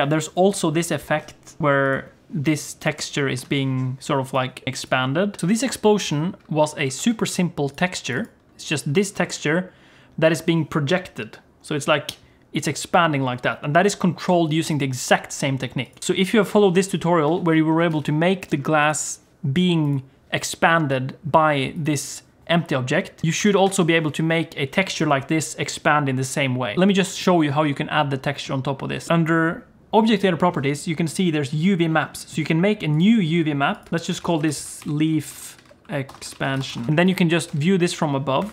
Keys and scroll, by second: 17.3 alt+a, 17.9 ctrl+s, 23.2 shift+a, 37.5 Tab, 38.4 KP_7.